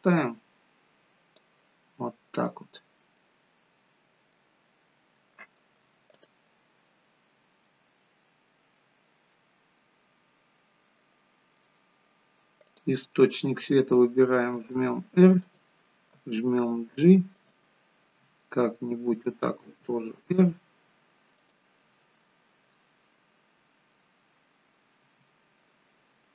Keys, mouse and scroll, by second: 1.9 scroll up 4, 3.3 middle click, 3.5 scroll down 3, 3.9-4.4 scroll up 2, 4.4 middle click, 6.1 click, 7.2-7.9 scroll down 2, 7.7 middle click, 11.2 scroll down 4, 11.6 middle click, 12.7 click, 14.6 r, 16.2 g, 19.6 r, 21.8-22.2 scroll up 6, 22.3 middle click, 25.2 r.